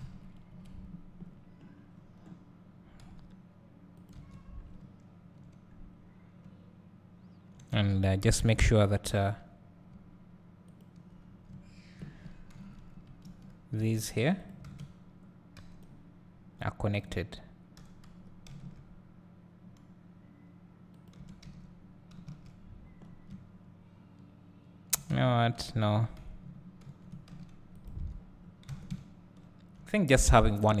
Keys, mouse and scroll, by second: 4.2 Tab, 4.6 scroll down 2, 4.8 `, 6.1-6.5 scroll up 2, 6.7 `, 7.9 Tab, 8.2 scroll up 2, 8.3 `, 10.8 alt+click, 11.5 `, 12.6 KP_1, 12.9 KP_3, 13.3 KP_1, 14.7 alt+a, 17.0 b, 18.1 g, 20.9 middle click, 21.3 Tab, 23.0 scroll down 1, 23.3 `, 25.3 Tab, 27.9 x, 28.0 Tab, 28.4 scroll down 2, 28.7 alt+a, 30.4-30.8 scroll down 2.